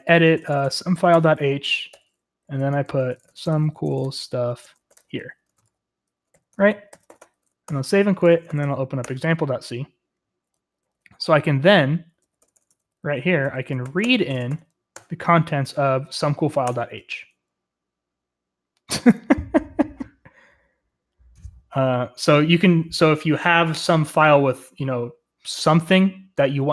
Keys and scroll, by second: 0.0-9.1 typing, 6.5 Escape, 10.4-15.4 typing, 16.6 Return, 16.6 typing.